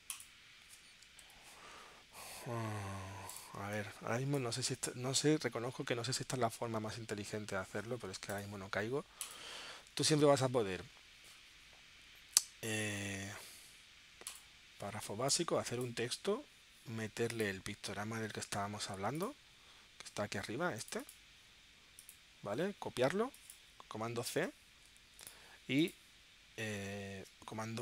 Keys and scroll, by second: 1.7 shift+super+p, 3.5 space, 24.8 super+c.